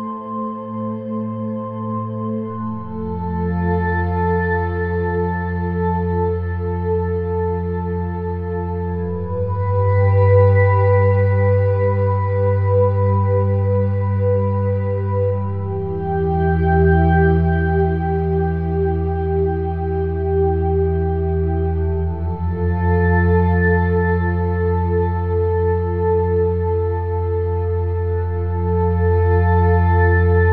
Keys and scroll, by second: 1.5 -, 2.2 -, 6.0 =, 6.4 -, 7.8 ], 10.5 -, 11.2 -, 15.9 [, 18.0 ], 21.4 [, 22.2 -, 23.2 -.